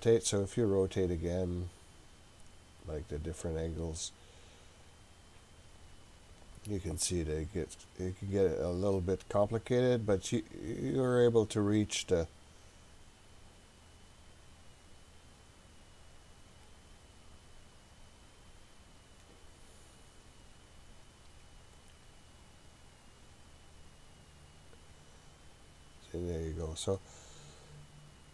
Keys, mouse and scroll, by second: 0.3 scroll up 1, 0.5-1.1 scroll down 2, 2.5-3.8 scroll down 4, 4.4-7.1 scroll down 10, 7.1-8.6 scroll up 2, 8.6-9.5 scroll up 2, 9.5-10.5 scroll up 1, 12.2-16.6 drag, 18.9-21.1 drag, 22.2 click, 25.2-26.6 drag, 27.0-28.3 middle drag.